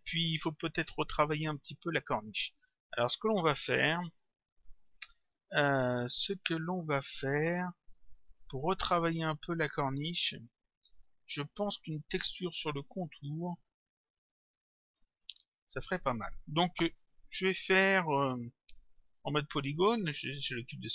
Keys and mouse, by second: 3.3 click, 19.2 click, 20.4 click.